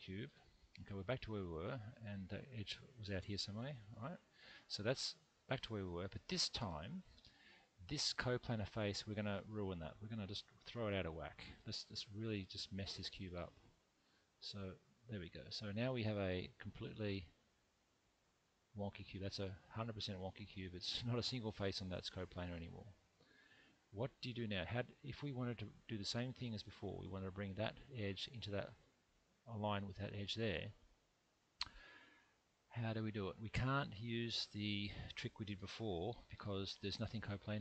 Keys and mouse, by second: 3.0 g, 3.8 click, 4.8-6.1 middle drag, 8.1 click, 11.6 g, 12.3 click, 14.3 g, 15.5 click, 16.6-24.5 middle drag, 29.7 2, 30.3 click, 31.8 1, 33.6-35.0 middle drag.